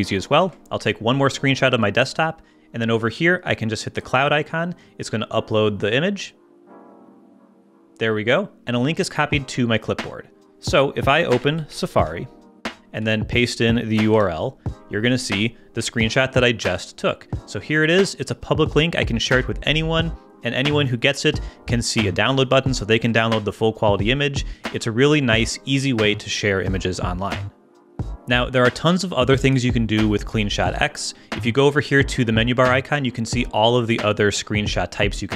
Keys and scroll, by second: 0.4 shift+super+3, 11.3 super+space, 11.5-12.3 typing, 12.8 super+Return, 13.0 super+v, 14.1 Return.